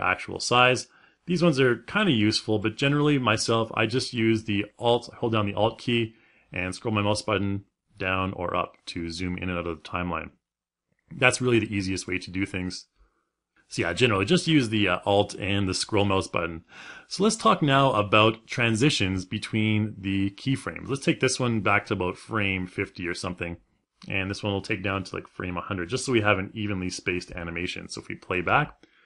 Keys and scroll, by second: 28.0 space.